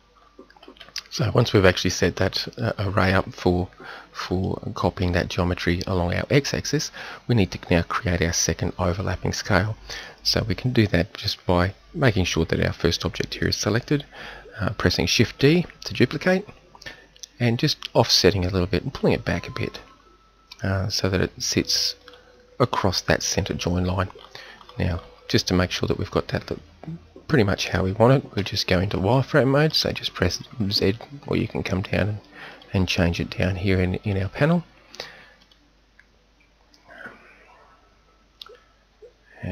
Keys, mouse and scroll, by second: 15.7 shift+d, 24.2 middle click, 24.4-25.0 middle drag, 28.4 z, 29.1 click, 29.1 middle drag, 29.6-30.5 middle drag, 30.6 middle click.